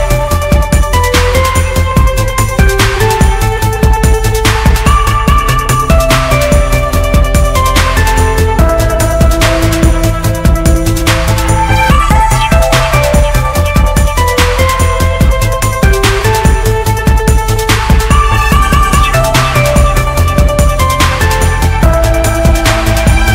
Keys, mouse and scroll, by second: 5.9 a, 6.5 a, 18.4 a.